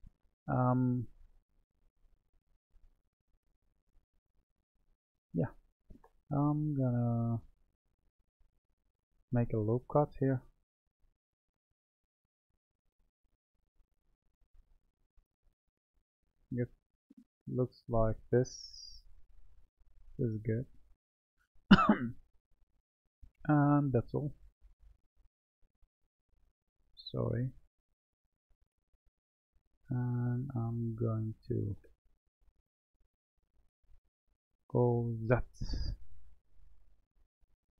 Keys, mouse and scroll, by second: 2.4-5.0 middle drag, 5.0 Tab, 7.6-12.1 drag, 19.0 click, 24.5 click, 26.1 click, 27.9-30.9 middle drag, 30.9-32.8 drag, 34.7 g.